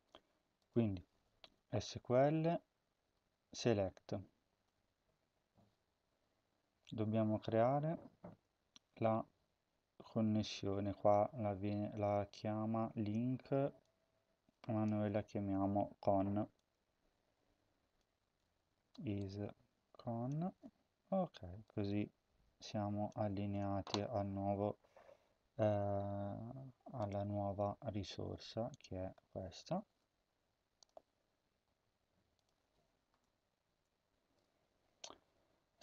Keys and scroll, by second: 0.1 Tab, 15.3 ctrl+c, 20.4 ctrl+v, 29.8 ctrl+c, 33.3 typing, 34.1 ctrl+v.